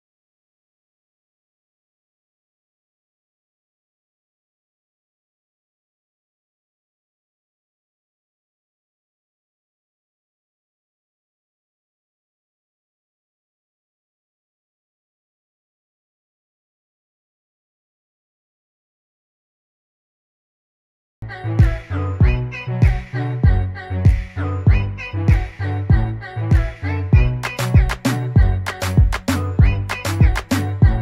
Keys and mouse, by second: 0.6 click, 4.3 ctrl+d, 6.1 click, 9.0 click, 10.1 BackSpace, 10.7 p, 12.9 BackSpace, 13.4 o, 14.5-15.0 typing, 18.9 click, 21.6 click, 24.2 click, 29.6 ctrl+d.